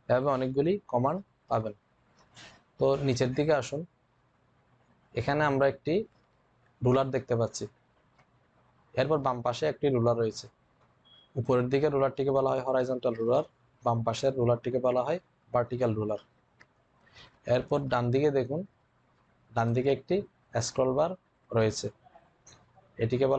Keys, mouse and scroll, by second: 19.4-23.3 drag.